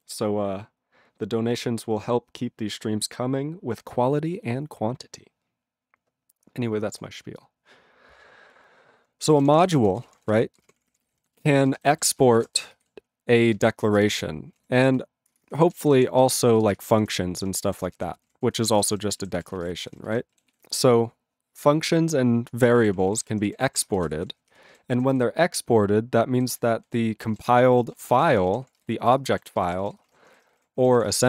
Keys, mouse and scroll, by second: 9.3 ctrl+space, 9.3 ctrl+a, 9.4 ctrl+p, 9.6 ctrl+p, 9.6 ctrl+g, 9.7 ctrl+e, 9.9 ctrl+a, 10.0 ctrl+n, 10.0 ctrl+space, 10.1 ctrl+e, 10.2 ctrl+n, 10.2 ctrl+e, 10.3 ctrl+g, 10.6 ctrl+space, 10.7 ctrl+p, 10.8 ctrl+p, 11.0 ctrl+g, 11.0 ctrl+n, 11.2 ctrl+n, 11.3 ctrl+e, 11.5 ctrl+space, 11.9 ctrl+alt+b, 12.2 ctrl+g, 12.4 ctrl+a, 12.5 ctrl+space, 12.9 ctrl+alt+f, 13.6 ctrl+g, 13.9 ctrl+f, 14.0 ctrl+space, 14.0 ctrl+e, 14.1 ctrl+g, 14.6 ctrl+a, 14.8 ctrl+e, 15.3-17.6 typing, 17.7 ctrl+BackSpace, 18.1 ctrl+a, 18.1 ctrl+k, 18.3 ctrl+k, 18.3 ctrl+p, 18.5 ctrl+k, 18.7 ctrl+p, 18.8 ctrl+space, 18.9 ctrl+e, 18.9 ctrl+g, 19.4 ctrl+s, 19.5 ctrl+space, 19.6 ctrl+p, 19.7 ctrl+p, 19.8 ctrl+g, 19.9 ctrl+e, 19.9 ctrl+n, 20.1 ctrl+n, 20.1 ctrl+e, 20.5 ctrl+s, 22.7 ctrl+space, 22.8 ctrl+a, 23.0 ctrl+p, 23.1 ctrl+p, 23.2 ctrl+g, 23.2 ctrl+e, 23.3 ctrl+n, 23.5 ctrl+n, 23.7 ctrl+a, 23.9 ctrl+space, 24.3 ctrl+alt+f, 24.7 ctrl+g, 25.1 ctrl+s, 26.5 ctrl+s, 26.9 ctrl+e, 27.2 ctrl+space, 27.3 ctrl+a, 27.4 ctrl+p, 27.5 ctrl+p, 27.8 ctrl+g, 27.9 ctrl+e, 28.0 ctrl+n, 28.1 ctrl+e, 28.4 ctrl+space, 28.5 ctrl+a, 28.6 ctrl+p, 28.8 ctrl+g, 28.8 ctrl+e, 28.9 ctrl+n, 29.0 ctrl+n, 29.1 ctrl+e, 29.3 ctrl+space, 29.3 ctrl+a, 29.4 ctrl+p, 29.5 ctrl+p, 29.6 ctrl+g, 29.6 ctrl+e, 29.7 ctrl+n, 29.8 ctrl+n, 29.9 ctrl+e, 30.1 ctrl+space, 30.1 ctrl+p, 30.2 ctrl+p, 30.3 ctrl+g, 30.3 ctrl+e, 30.4 ctrl+n, 30.5 ctrl+n, 30.6 ctrl+e, 31.0 ctrl+s, 31.1 ctrl+space, 31.2 ctrl+a, 31.2 ctrl+p.